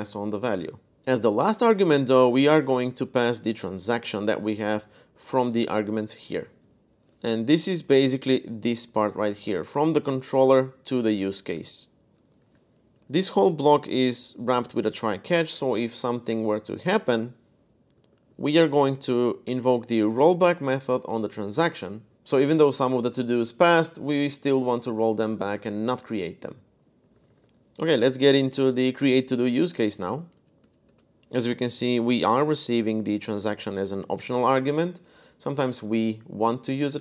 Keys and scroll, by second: 1.4-1.8 typing, 3.6-6.5 typing, 6.9 super+Tab, 12.2 super+Tab, 12.9-14.7 typing, 17.7 z, 17.9 z, 18.1 z, 19.2 shift+v, 21.4 Escape, 26.6-30.6 typing, 31.2 Escape, 32.0 shift+v, 32.5 Escape, 33.0 f, 33.6 Escape.